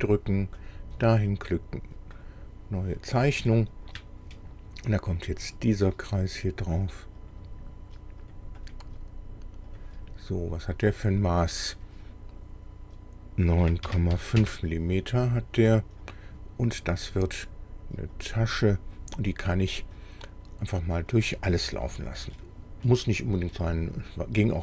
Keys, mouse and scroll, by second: 0.6 click, 2.2 click, 3.2 scroll down 1, 3.5 shift+middle click, 5.3 click, 7.2 click, 8.3 click, 8.6 right click, 9.7 click, 11.1 click, 13.6 KP_9, 13.9 KP_Decimal, 14.1 KP_5, 14.4 KP_Enter, 16.1 click, 18.2 click, 20.0 click, 21.1 click, 21.8-22.1 scroll down 2, 22.4-23.7 drag, 24.4 click.